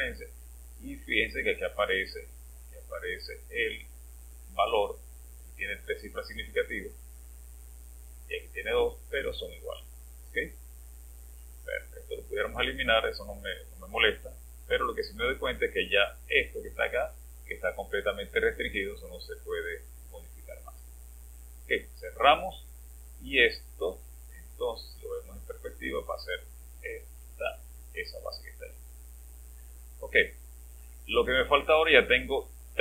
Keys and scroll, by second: 27.3 space.